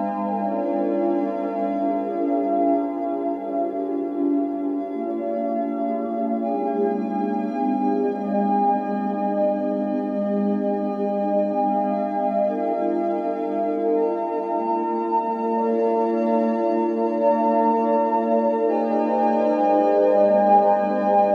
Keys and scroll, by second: 1.8-2.7 typing, 8.3 Escape, 8.6-9.5 typing, 11.9 Escape, 15.8-16.4 typing.